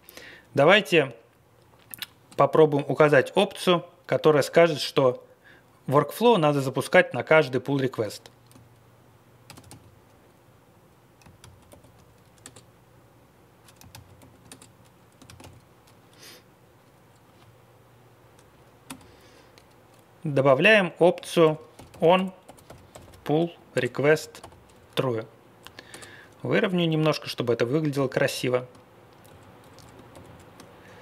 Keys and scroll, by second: 2.4 BackSpace, 9.4 ctrl+x, 11.4 alt+x, 11.6 alt+p, 12.4 Return, 13.9 alt+x, 14.1 alt+p, 14.5 Return, 15.2 ctrl+x, 15.4 o, 18.8 space, 21.2-25.4 typing, 23.7 Return, 25.1 Left, 25.5 Left, 25.5 Left, 25.9 Return, 26.7 Right, 27.9 ctrl+l, 28.3 ctrl+l, 29.2 Up, 29.6 Page_Up, 29.7 Page_Up, 30.1 ctrl+l, 30.2 ctrl+l.